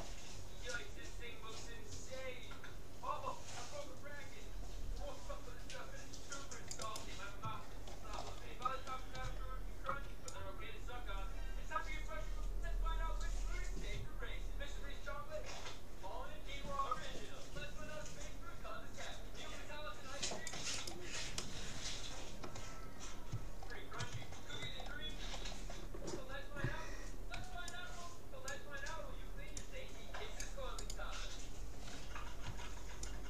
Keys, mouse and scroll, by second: 7.6-10.8 middle drag, 10.0 c, 21.4-23.0 middle drag, 24.2-24.8 scroll down 1, 24.8 scroll up 1, 25.2-27.4 middle drag, 27.4 c, 32.6 c.